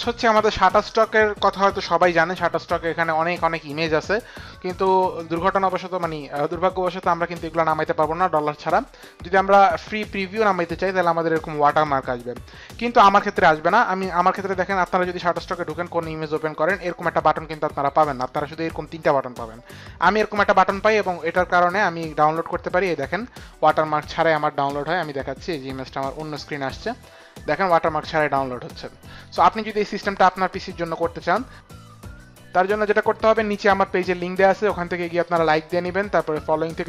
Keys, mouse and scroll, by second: 0.0 click, 22.8 click, 24.1 click, 24.6 click, 25.4 click, 34.1 click.